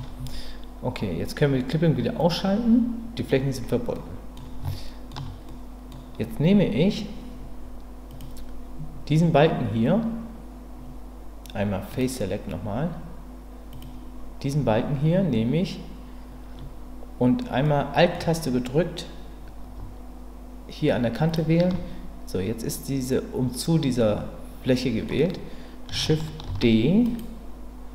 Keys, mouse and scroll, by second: 2.2 click, 3.9 middle click, 4.7 shift+middle click, 5.5 middle click, 8.1 click, 11.9 click, 13.7 click, 17.6 middle click, 21.3 alt+click, 24.0-25.1 middle drag, 26.5 shift+d.